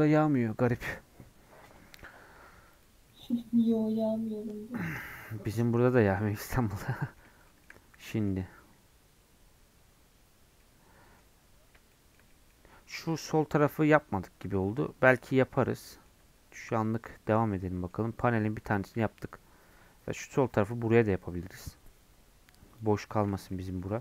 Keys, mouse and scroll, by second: 3.4 scroll up 1, 3.7 middle click, 4.0-4.3 scroll down 1, 4.3-22.7 middle drag, 22.7 click, 23.2-23.5 scroll up 1, 23.5 shift+middle click.